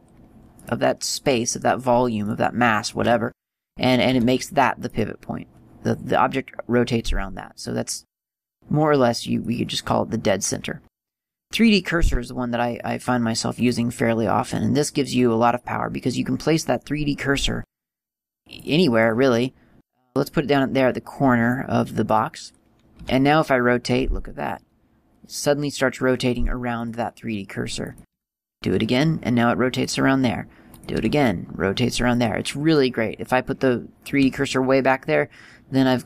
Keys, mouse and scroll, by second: 0.8 right click, 5.1 r, 5.2 click, 8.5 click, 10.6 click, 13.8 click, 18.8 click, 23.2 r, 28.4 r, 30.1 click, 31.2 r, 32.5 click, 34.5 r.